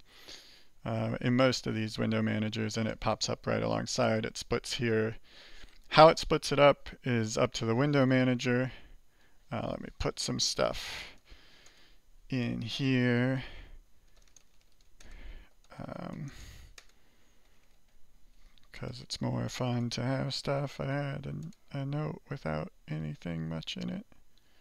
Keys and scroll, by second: 15.2-20.3 typing.